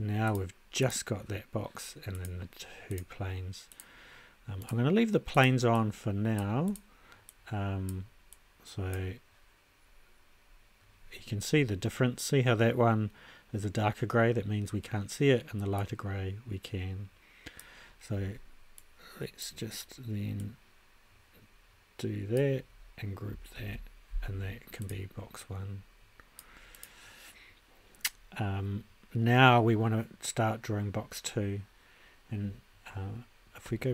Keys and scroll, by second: 23.5 super+g.